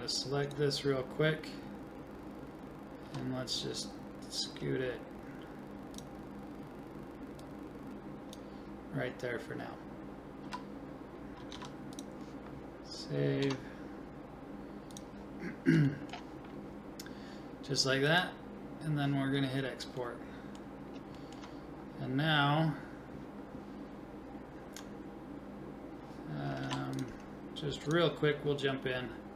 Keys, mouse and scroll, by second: 3.0 g, 7.4-9.2 drag, 10.4 a, 11.5 ctrl+s, 13.4 Tab, 15.0 click, 15.9 middle click, 16.6 click, 16.9 middle click, 18.1-20.0 drag, 20.0-22.9 middle drag, 23.1-26.6 middle drag, 26.6 ctrl+s, 29.2 ctrl+s.